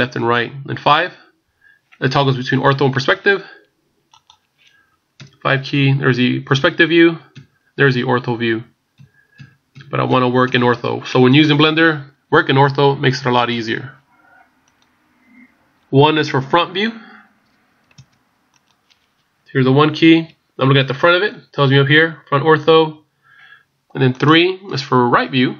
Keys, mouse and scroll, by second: 4.3 click, 5.1 KP_5, 7.3 KP_5, 13.6 click, 18.7 click, 19.8 KP_1.